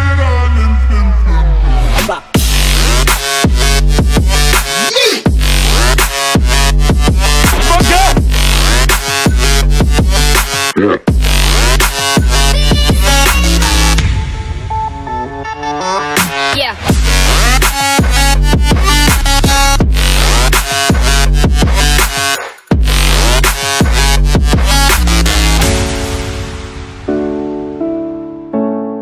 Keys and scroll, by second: 4.5 super+l, 6.9 Return, 8.7-11.0 typing, 11.4 alt+shift+super+e, 12.6 ], 13.2 [, 16.6 [, 17.0 ], 17.8 [, 18.3 ], 19.2 Return, 19.4 space, 20.4 shift+super+e, 21.1 super+z, 22.8-23.7 typing, 26.7-29.0 typing.